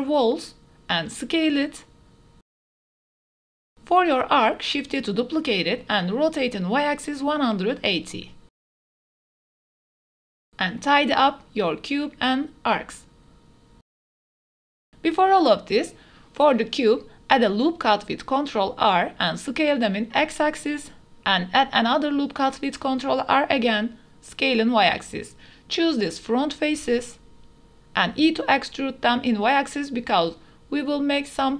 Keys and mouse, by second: 0.1 s, 0.5 s, 1.1-1.4 drag, 1.7 click, 1.9-5.1 typing, 2.4 click, 2.7 shift+click, 2.9 click, 3.2 shift+click, 3.5 Tab, 3.5 click, 7.6-9.1 typing, 8.3 KP_Enter, 10.8 click, 11.1 click, 11.2 Tab, 11.4 g, 11.5 z, 11.9 click, 12.1 click, 12.5 click, 12.7 Tab, 12.7 click, 12.9 Tab, 13.2-14.3 typing, 13.5 shift+click, 13.7 Tab, 13.8 shift+click, 14.0 click, 14.3 click, 14.5 Tab, 14.5 click, 14.9 ctrl+r, 16.0 click, 16.7 s, 16.9 x, 19.6 click, 20.0 click, 20.5 3, 21.2 click, 21.5 ctrl+r, 22.2 s, 22.3 z, 23.8 click, 24.2 3, 24.8 click, 25.0 middle click, 26.5 shift+click, 26.7 middle click, 27.1 shift+click, 27.5 ctrl+z, 27.7 shift+click, 28.4 shift+middle click, 28.6 middle click, 29.2 shift+click, 29.4 middle click, 29.4 click, 29.6 middle click, 30.0 e, 30.9 shift+middle click, 31.0 middle click, 31.2 z, 31.2 x.